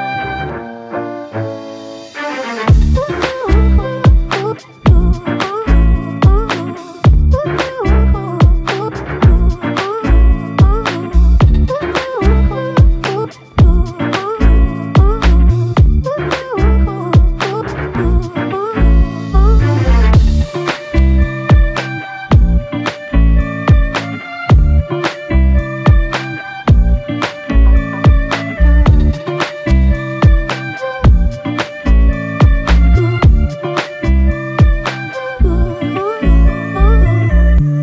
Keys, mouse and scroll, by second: 1.8 double click, 3.6 ctrl+click, 6.3 ctrl+click, 9.7 shift+click, 12.3 alt+click, 19.7 ctrl+click, 24.0 shift+click, 26.4 shift+click, 34.1 shift+click, 34.2 shift+click, 35.0 shift+click, 36.0 shift+click, 36.6 alt+click.